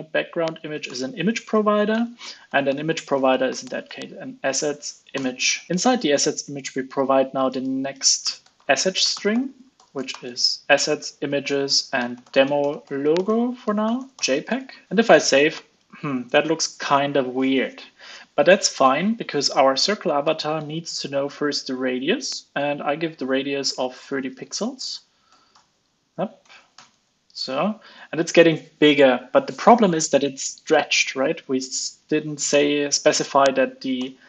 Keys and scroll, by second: 14.6 super+s, 20.5 ctrl+space, 26.0 super+s, 26.7 alt+super+l, 27.0 super+s, 32.5 alt+Return, 34.0 alt+Return.